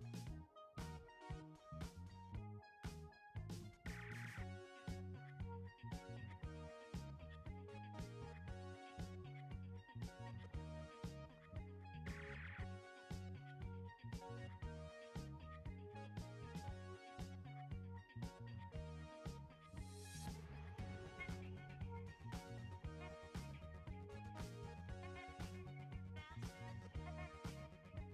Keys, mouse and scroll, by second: 1.2 click, 4.8-7.4 drag, 9.1-25.2 drag, 27.8 click, 27.8 click.